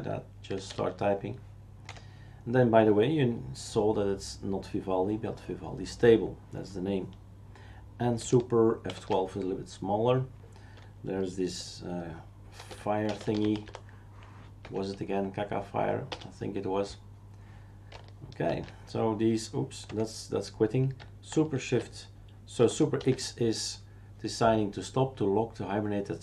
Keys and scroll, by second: 0.0-1.2 typing, 2.1 Escape, 8.9 super+F12, 12.7-14.6 typing, 14.6 Down, 16.1 Return, 18.5 super+x, 19.9 Escape, 23.0 super+x.